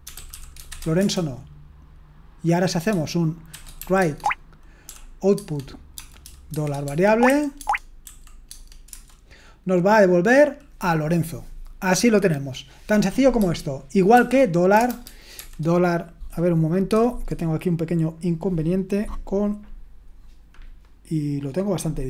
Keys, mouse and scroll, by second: 0.0-1.2 typing, 3.5-8.9 typing, 4.0 Tab, 15.4 typing.